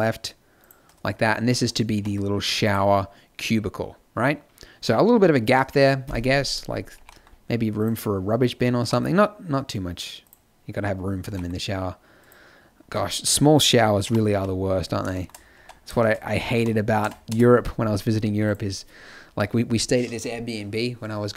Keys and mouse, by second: 1.9 g, 6.9 g, 8.7 g, 11.2 g, 14.0 KP_7, 14.3 z, 15.5 Tab, 16.5 a, 16.9 Tab, 17.2 KP_0, 17.5 z.